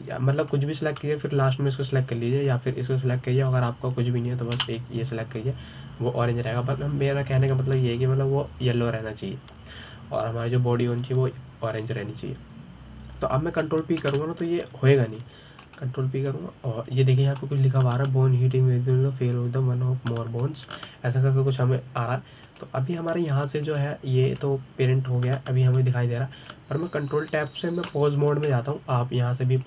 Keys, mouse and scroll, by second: 4.1 click, 6.4 a, 15.8 ctrl+p, 24.2 click, 25.4 click, 26.1 g, 29.5 ctrl+Tab.